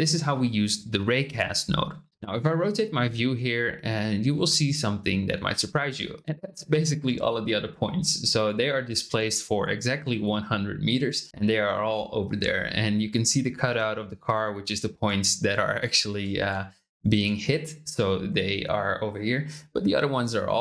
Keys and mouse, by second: 2.1 t, 3.1 click, 3.1-5.9 middle drag.